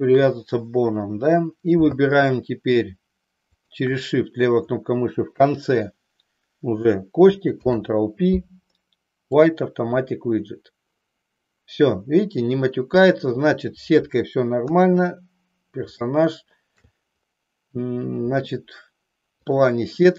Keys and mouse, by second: 3.5 shift+click, 7.4 ctrl+p, 14.6 KP_3, 16.2 shift+middle click.